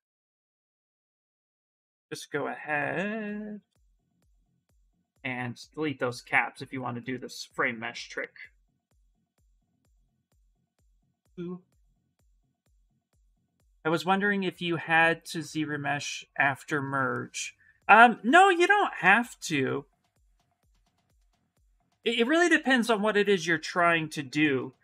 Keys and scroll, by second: 7.9 s, 23.4 s.